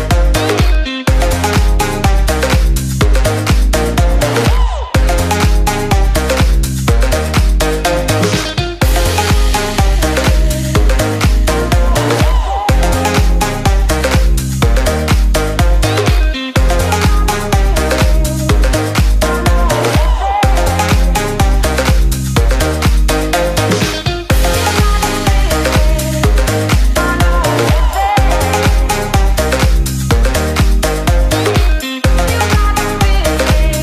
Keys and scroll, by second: 6.9 ctrl+space, 20.9 ctrl+space, 25.7 ctrl+space, 32.0 ctrl+c, 32.6 ctrl+space.